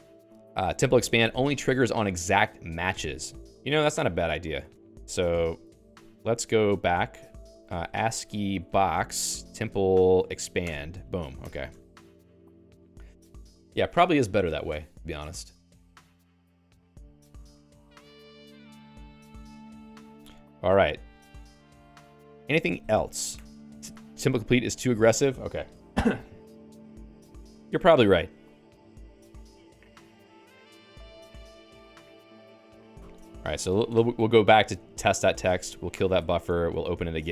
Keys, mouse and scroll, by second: 3.1 Escape, 5.8 ctrl+g, 6.7 Return, 7.0-9.4 typing, 10.2 ctrl+j, 10.6 Return, 11.3-12.6 typing, 17.4 d, 17.7 ctrl+s, 19.3 ctrl+s, 21.1 Return, 27.1-32.9 typing, 32.9 ctrl+alt+x, 34.7 Return, 35.6 Return, 36.4 ctrl+f, 37.1 ctrl+j.